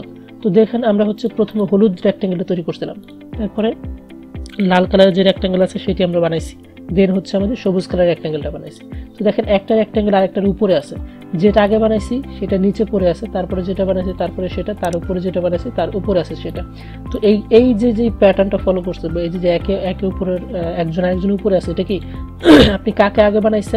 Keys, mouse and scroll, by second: 8.8 click, 14.2 click, 16.6-22.0 drag.